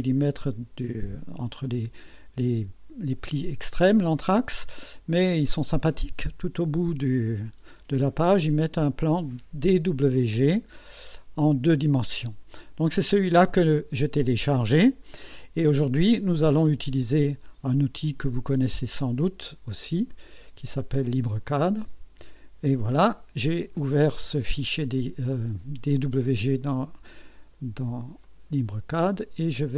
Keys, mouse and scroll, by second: 5.6-8.8 drag, 16.8 click, 19.0 click, 20.1 right click, 21.4 click, 28.2 click, 29.2 click.